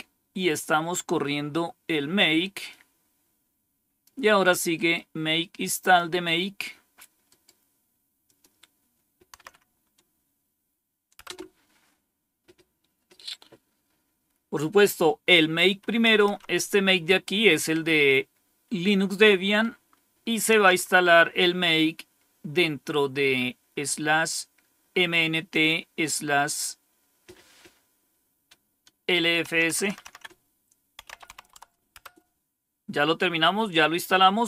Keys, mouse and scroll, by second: 2.6-3.9 drag, 4.6 right click, 5.6 click, 7.1 right click, 8.1 click, 9.3 Right, 11.1 Return, 16.0 Up, 16.2 Up, 20.4 Down, 29.4 Down, 29.6 Down, 29.8 Down, 30.0 Down, 30.7-31.7 typing, 31.9 Return.